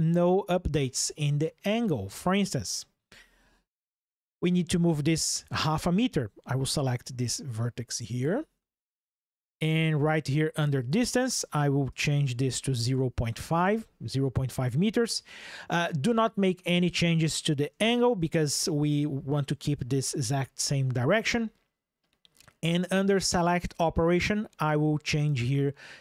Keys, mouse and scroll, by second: 1.7 ctrl+shift+\, 3.4 ctrl+shift+7, 6.5-7.9 drag, 10.5-12.6 drag, 23.6-26.0 drag.